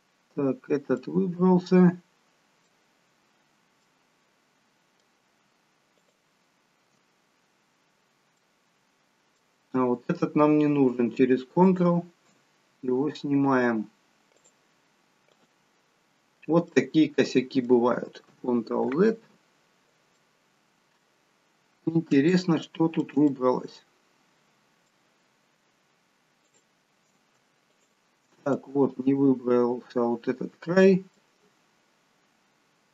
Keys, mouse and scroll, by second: 0.6-1.0 scroll down 1, 1.0 middle click, 3.0-3.7 scroll up 4, 3.8 middle click, 5.9 alt+shift+click, 7.2 scroll down 3, 8.0 scroll up 2, 8.3 middle click, 11.6 shift+click, 12.4 scroll down 2, 14.4 click, 16.7 middle click, 18.9 ctrl+z, 20.1 middle click, 22.3 shift+middle click, 23.3 middle click, 26.4 shift+click, 28.5 middle click, 31.7 scroll down 1.